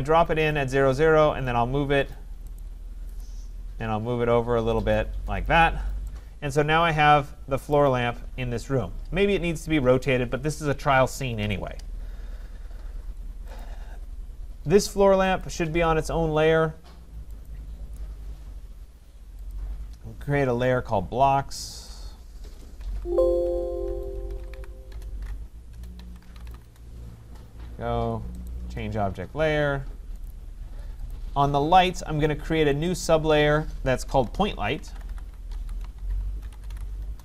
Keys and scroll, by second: 5.5 Escape, 22.8 ctrl+s, 24.9 BackSpace, 26.6 Return, 37.0 Return.